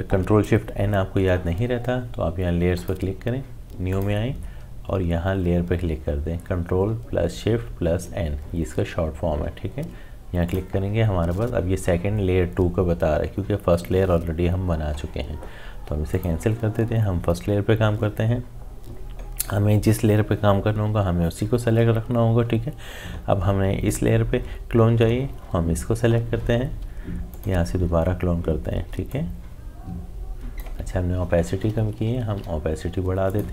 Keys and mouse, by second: 2.8 click, 10.4 click, 16.1 click, 27.3-32.1 alt+drag, 32.1 ctrl+z, 33.3-33.5 drag.